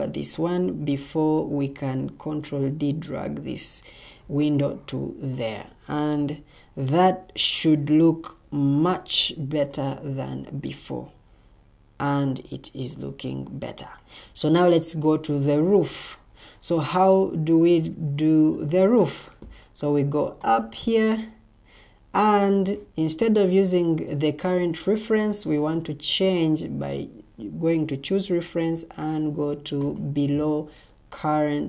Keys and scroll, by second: 0.8 ctrl+d, 5.9 Escape, 8.3 Delete.